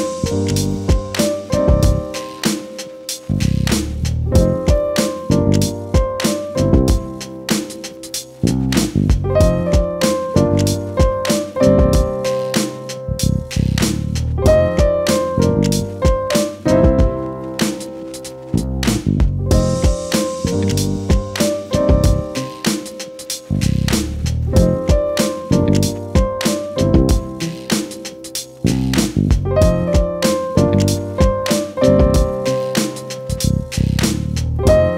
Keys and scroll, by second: 7.5 ctrl+s, 16.6 ctrl+z, 18.6 ctrl+z, 20.7 ctrl+z.